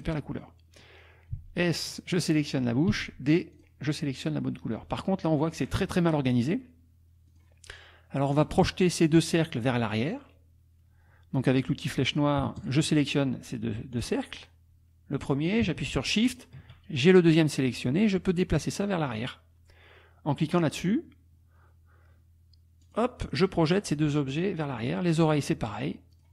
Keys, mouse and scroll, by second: 0.4 click, 1.3 s, 1.9 click, 2.9 d, 3.6 click, 4.4 click, 7.3 click, 8.3 click, 12.6 shift+click, 14.0 click, 14.4 click, 16.4 shift+click, 22.8 click, 24.3 click, 24.8 click, 26.1 click.